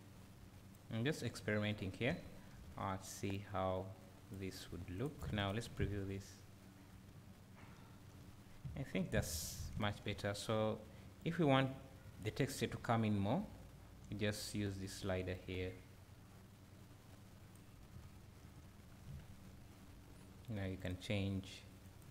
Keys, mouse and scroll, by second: 5.4 ctrl+shift+click, 7.7 `, 8.5 scroll up 1, 8.7 `, 11.3-21.9 drag, 12.5 scroll down 1, 12.7 `, 18.0 `, 18.9 scroll up 1, 19.1 `.